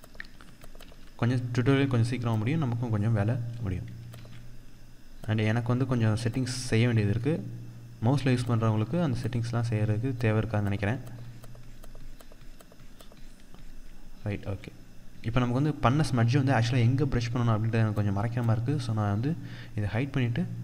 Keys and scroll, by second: 0.3 ctrl+=, 3.6 ctrl+z.